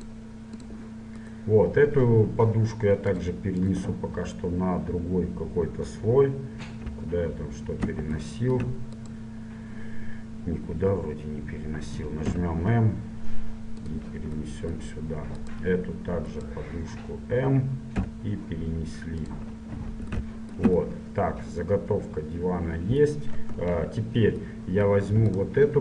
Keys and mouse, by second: 0.8-2.0 drag, 1.3-3.3 right drag, 3.3-5.1 drag, 7.0 KP_Divide, 7.7-8.7 drag, 8.7 middle click, 9.1-10.3 right drag, 12.4 m, 16.5-18.1 right drag, 18.1 m, 20.5-22.8 middle drag, 23.9 KP_3, 25.5-25.8 drag.